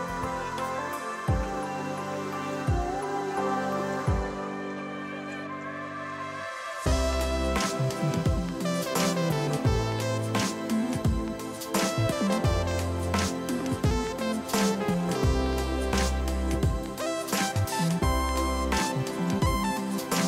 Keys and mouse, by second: 0.3 KP_6, 1.6 ctrl+super+z, 2.7 click, 3.3 8, 3.4 click, 8.3 a, 8.4 click, 8.6 click, 8.7 right click, 8.9 click, 9.1 a, 9.2 click, 12.4 click, 12.8 r, 13.1 Right, 13.4 ctrl+1, 14.3 right click, 14.8 click.